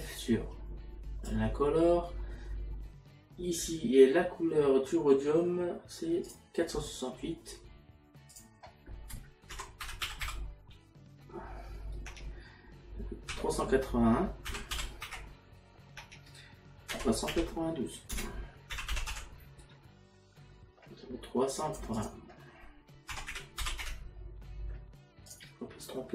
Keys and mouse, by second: 6.3 click, 8.3 click, 9.5 KP_Decimal, 13.3 KP_Decimal, 14.6 KP_6, 16.0 KP_1, 16.9 KP_Decimal, 21.6 click, 23.1 KP_Decimal, 25.3 click.